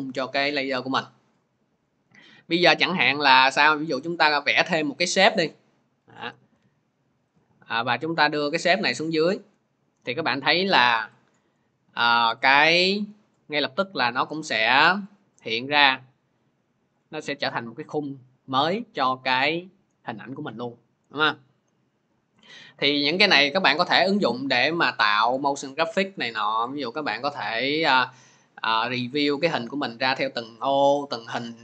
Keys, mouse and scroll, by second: 4.0 click, 5.2 click, 7.1 shift+click, 9.1 click, 10.2 v, 12.2 click, 25.6 click, 27.8 click.